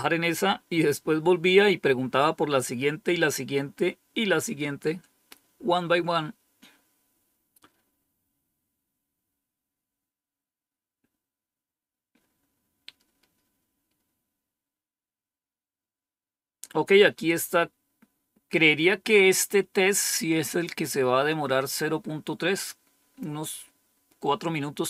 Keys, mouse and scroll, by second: 20.3-21.3 scroll up 1.